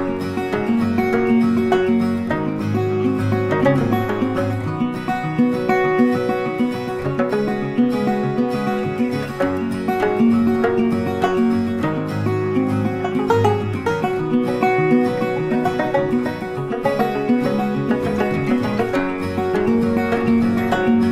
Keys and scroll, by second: 11.4 Delete, 14.0 ctrl+d.